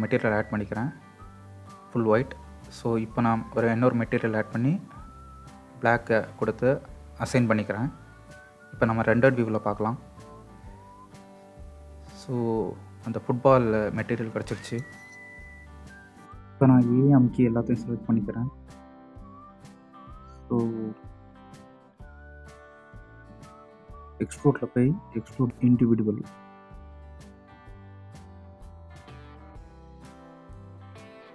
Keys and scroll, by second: 18.7 a.